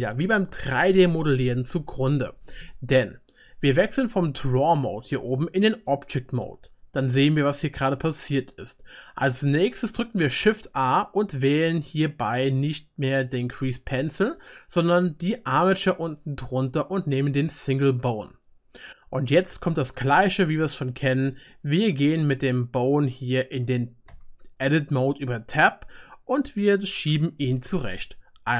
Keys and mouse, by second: 6.6-10.9 drag, 6.6-8.8 middle drag, 6.6-8.8 right drag, 10.4 shift+a, 13.5-14.1 drag, 14.1 click, 17.4-21.5 right drag, 22.8 click, 24.1 Tab, 25.4-26.9 right drag, 26.9-28.5 drag, 27.4 g.